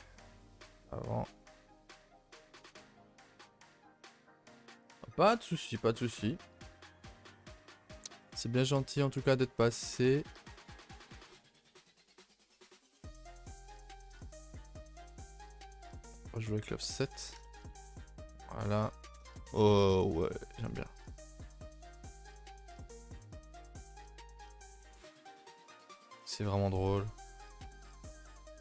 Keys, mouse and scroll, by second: 1.7 middle drag, 2.0 scroll up 2, 2.2-3.7 shift+middle drag, 3.7 a, 3.9 a, 7.8-8.2 middle drag, 8.2 click, 9.6-16.0 drag, 16.6 middle drag, 16.8 scroll down 2, 17.0 a, 17.2 a, 17.4-18.0 shift+middle drag, 18.0 KP_0, 18.9-19.3 scroll up 3, 19.3-19.6 shift+middle drag, 19.6 a, 19.7 a, 19.9 click, 21.8 click, 22.6 a, 22.7 a, 22.9-23.4 scroll down 3, 23.4-23.8 middle drag, 23.8 scroll up 4, 24.1-24.5 shift+middle drag, 24.5-24.8 scroll up 4, 24.9 middle drag, 25.1 scroll up 2, 25.6 click, 25.8 Tab, 26.0 middle click, 26.4 a, 26.5 a, 27.4 click, 27.8 click, 28.1 shift+middle click, 28.3-28.6 scroll up 1.